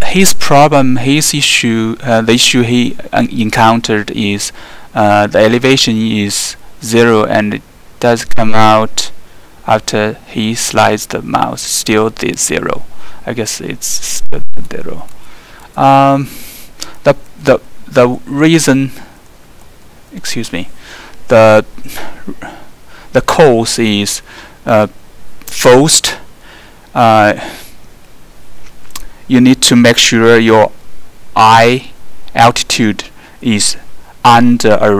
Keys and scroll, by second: 17.0 alt+2, 17.4 alt+3, 18.1 alt+4, 19.0 alt+3, 19.6 alt+2, 19.9 alt+1.